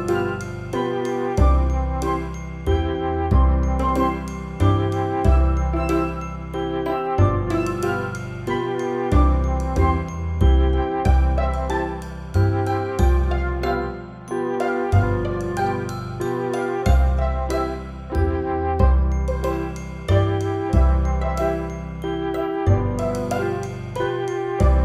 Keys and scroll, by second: 1.7 i, 2.1 o, 2.4 Return, 3.7 space, 4.4 v, 5.9 F9, 7.4 ctrl+0, 20.7 space, 22.3 shift+u, 23.2 u, 23.6 space.